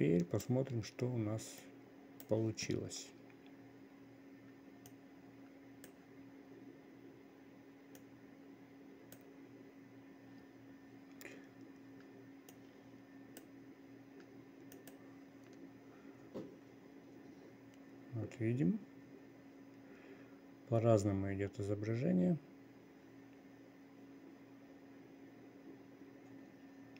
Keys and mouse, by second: 2.1-2.8 drag, 5.5-6.5 drag, 8.5-9.7 drag, 13.0-26.9 drag.